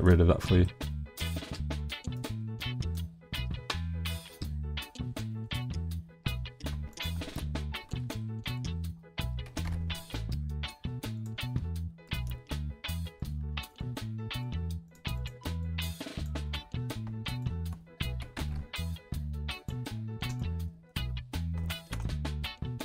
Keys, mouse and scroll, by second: 0.1 middle click, 0.9 middle click, 2.0 click, 3.5 middle click, 4.3 middle click, 5.2 middle click, 7.0 middle click, 7.2 middle click, 8.2 shift+middle click, 9.5 g, 9.7 y, 11.2 click, 11.4 click, 13.2 click, 14.3 shift+click, 15.2 shift+click, 16.2 shift+click, 17.3 shift+click, 18.2 g, 18.4 z, 19.6 click, 20.4 click, 20.7 click, 21.3 shift+click, 21.7 shift+click, 21.9 middle click.